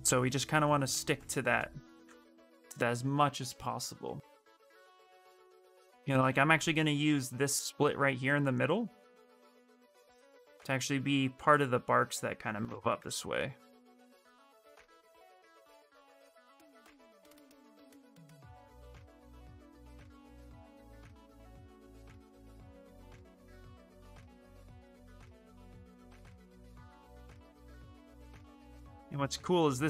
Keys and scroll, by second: 1.5 ctrl+z, 1.7 ctrl+z, 5.9 ctrl+z, 13.7 shift+f.